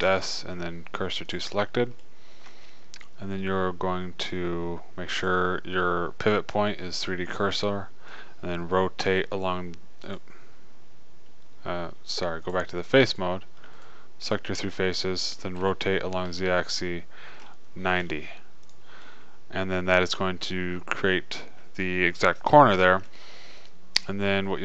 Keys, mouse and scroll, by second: 0.3 shift+s, 5.4 click, 7.6 middle click, 9.5 e, 10.5-12.3 drag, 12.3 middle click, 16.1 r, 21.3 middle click, 21.5-22.8 middle drag, 23.7-24.6 middle drag.